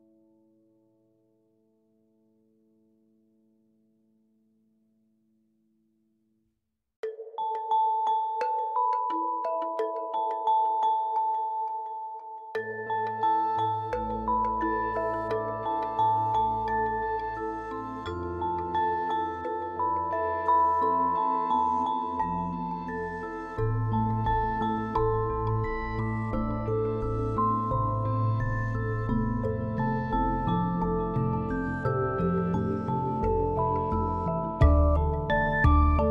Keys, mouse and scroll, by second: 1.8-4.8 drag, 9.1-14.8 drag, 19.2 BackSpace, 22.7-25.7 drag, 33.2 click, 35.0-36.1 shift+middle drag.